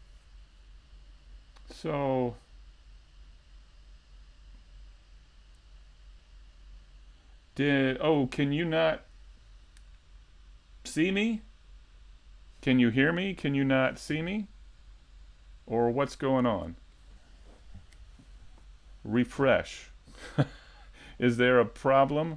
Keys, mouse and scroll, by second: 6.8 middle click, 8.5-9.2 scroll up 3, 8.8 shift+middle click, 9.3 scroll down 2, 9.5 middle click, 10.2 scroll down 1, 10.5 middle click, 11.3 middle click, 14.0 right click, 14.9 middle click, 15.6-16.0 scroll up 2, 15.9 middle click, 17.1 KP_7, 17.3 KP_5, 18.6 shift+middle click, 18.6 scroll down 3, 19.0-20.0 scroll up 2, 19.3 shift+middle click, 20.0 shift+d.